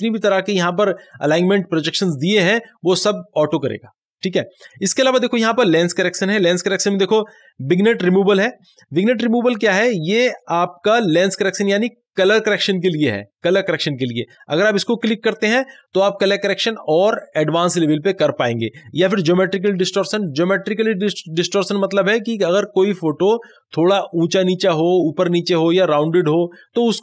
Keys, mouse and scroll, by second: 14.4 click.